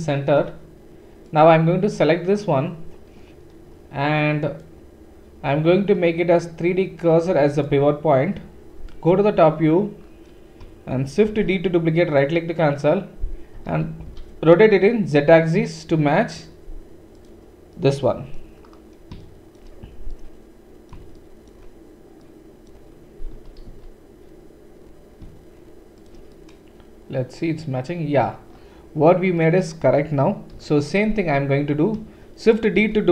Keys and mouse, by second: 1.2 click, 1.3-4.5 middle drag, 4.5-17.2 drag, 9.1 KP_7, 11.4 shift+d, 13.5 r, 17.2-18.7 middle drag, 18.7-19.2 drag, 19.2-28.9 shift+middle drag, 23.3 r, 26.0 r, 28.9 typing, 30.5 KP_7, 32.9 shift+d.